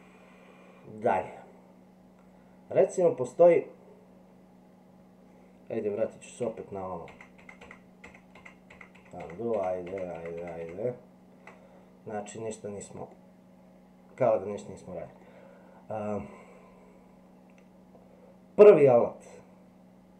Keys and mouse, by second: 6.4 ctrl+z, 7.1 ctrl+z, 7.4 ctrl+z, 7.6 ctrl+z, 8.9 ctrl+z, 9.5 ctrl+z, 10.4 ctrl+z, 13.1-14.5 middle drag, 15.2-16.2 middle drag.